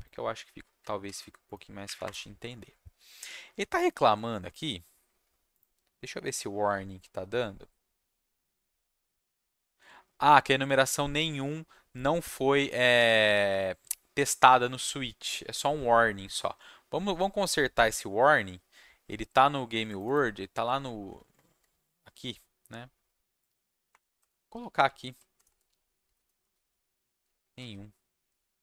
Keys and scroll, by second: 1.0 ctrl+s, 1.8 Up, 2.0 Return, 23.9 Return, 24.1-28.6 typing.